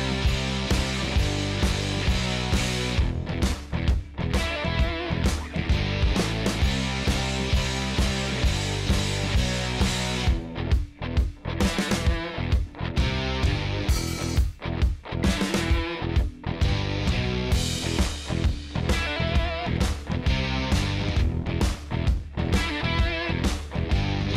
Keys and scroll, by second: 23.8 space.